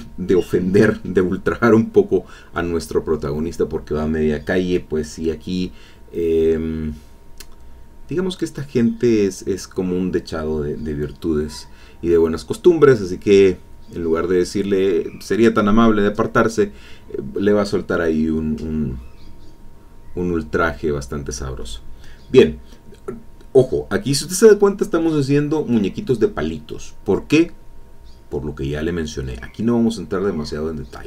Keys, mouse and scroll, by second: 3.2-4.7 drag, 7.8-11.0 drag, 13.4-15.7 drag, 15.9 e, 16.0-19.3 drag, 17.5 e, 19.4 click, 20.6-26.2 drag, 27.0 click, 27.9 click, 29.9 click, 30.0 click.